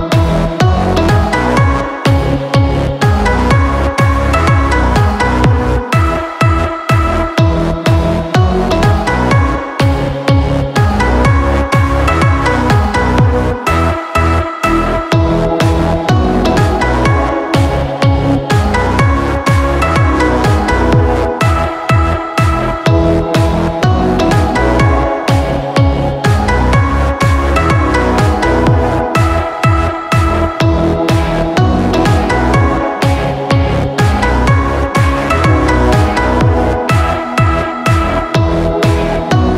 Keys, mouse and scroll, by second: 11.7 ctrl+j, 13.7 click, 16.3-16.8 alt+scroll, 17.5 space, 17.9 click, 19.1 click, 19.7-20.0 alt+scroll, 21.7 click, 24.1 right click, 25.3 click, 27.1 space, 27.2 click, 27.7 click, 33.9-34.5 alt+scroll, 35.5-36.1 alt+scroll, 37.1 click, 37.7-38.5 alt+scroll, 38.8 space, 39.1 click.